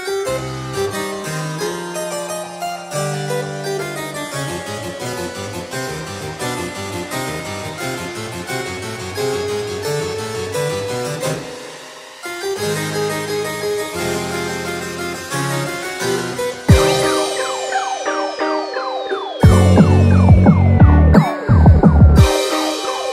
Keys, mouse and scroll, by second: 0.5-1.2 scroll up 5, 2.0 click, 2.4-3.3 scroll down 3, 3.3 click, 3.3 scroll down 1, 3.7 click, 4.5 click, 10.1-12.7 scroll down 5, 13.4 click, 15.3 click, 15.9 scroll down 6, 17.8 click, 19.1-19.9 scroll up 1, 20.6 shift+a.